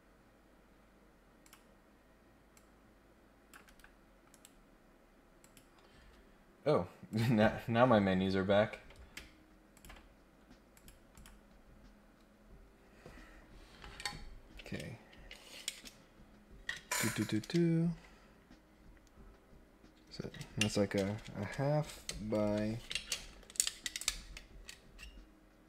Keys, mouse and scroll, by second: 0.3 scroll up 2, 1.4 click, 2.5 click, 3.6 Escape, 4.3 right click, 5.4 click, 7.0 click, 7.6 scroll up 1, 7.8-8.6 scroll down 3, 8.8 scroll up 1, 9.7 ctrl+click, 10.7 click, 11.1 click, 11.4 scroll up 1, 11.7 scroll down 1, 11.9-12.4 scroll up 3.